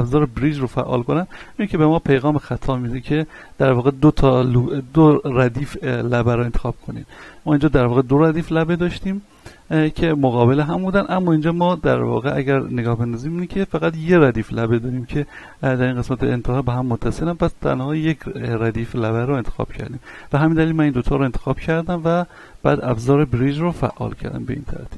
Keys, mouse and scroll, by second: 0.9 click, 5.3 right click, 5.9 shift+right click, 7.8 shift+right click, 9.0 middle click, 11.0 right click, 11.8 shift+right click, 13.3 middle click, 20.5 right click, 21.1 shift+right click, 22.9 w, 23.9 click, 24.5-24.9 middle drag.